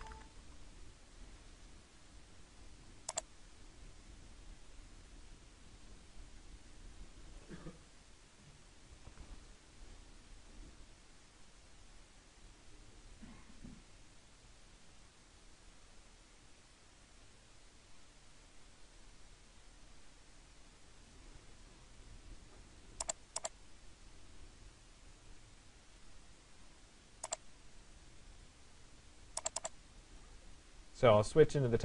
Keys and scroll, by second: 0.0 BackSpace, 0.5 Return.